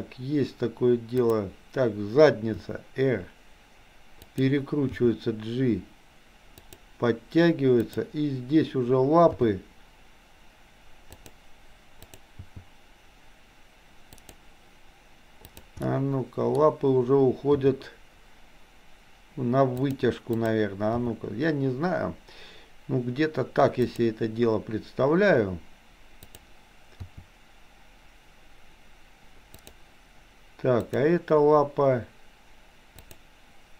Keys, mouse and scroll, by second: 2.6 r, 5.1 g, 7.8 click, 9.4 g, 11.9 click, 12.4 g, 15.6 click, 15.9 middle click, 17.7 r, 20.4 click, 20.9 g, 27.1 r, 30.8 click, 33.2 click.